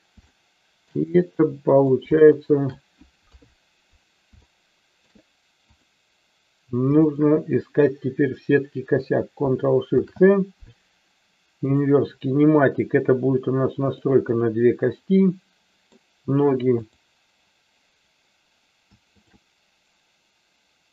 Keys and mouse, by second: 0.3 shift+middle click, 1.3 middle click, 2.4 shift+middle click, 3.3 KP_3, 4.5 shift+middle click, 7.0-8.5 shift+drag, 9.9 ctrl+shift+c, 15.0-16.0 middle drag, 16.8-18.4 drag, 19.1-20.6 shift+drag.